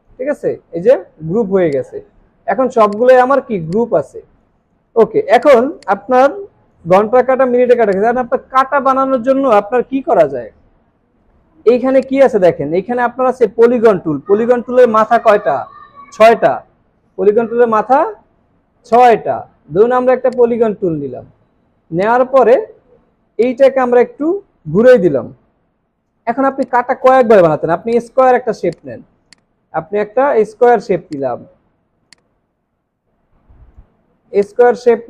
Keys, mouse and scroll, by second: 1.1 ctrl+z, 2.6 alt+scroll down 1, 3.3 space, 5.8 double click, 7.7 space, 11.9 right click, 20.3 shift+click, 27.9 right click.